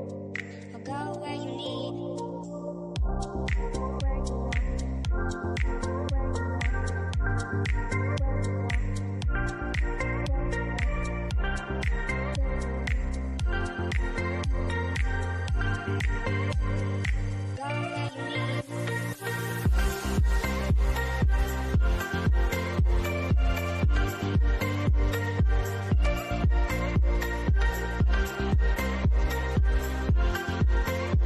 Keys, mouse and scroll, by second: 0.0 scroll up 1, 2.5 click, 8.7 click, 10.6 click, 17.4 click, 20.5 click, 22.4 scroll down 1, 25.5 scroll up 1, 27.1 click, 29.8 click.